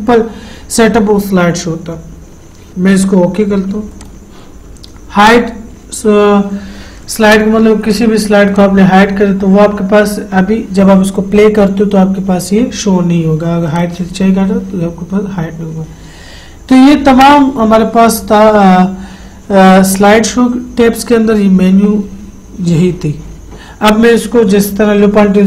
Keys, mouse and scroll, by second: 4.3 click, 8.3 click, 14.1 click.